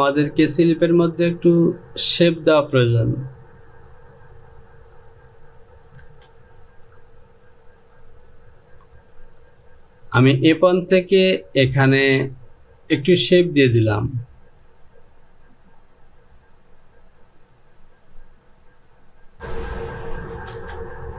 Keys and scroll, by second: 6.1 Return, 20.5 Return.